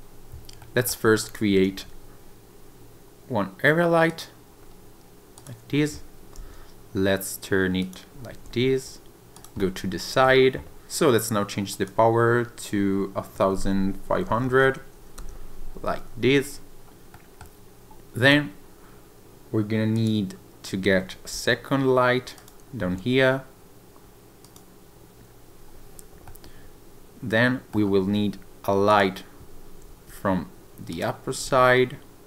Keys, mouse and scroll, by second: 0.6 middle click, 1.2 click, 1.7 shift+a, 5.3 click, 6.3 r, 7.8 click, 8.4 g, 9.3 click, 9.6 middle click, 11.7 click, 14.4 0, 16.5-16.8 scroll up 1, 16.8-17.1 scroll down 1, 17.1 middle click, 19.9 click, 20.6 scroll down 1, 21.3 shift+d, 22.4 click, 22.8 r, 24.4 click, 26.3 middle click, 28.9 click, 29.9 shift+d, 30.9 click, 31.4 r.